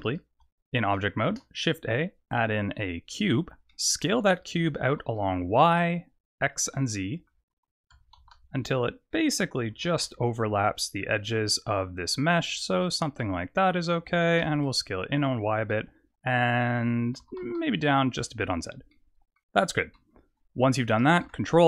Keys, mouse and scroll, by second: 1.3 shift+a, 3.7 middle click, 4.8 s, 6.7 middle click, 7.9 s, 9.8 s, 13.2 middle click, 14.0 s, 15.7 middle click, 17.2 s, 18.9 middle click, 21.2 ctrl+a.